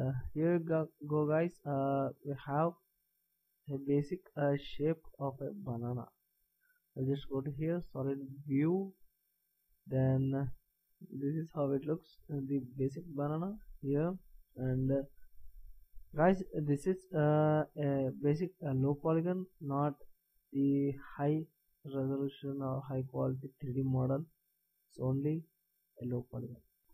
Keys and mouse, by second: 7.1 z, 9.4-11.7 middle drag, 13.8 middle click.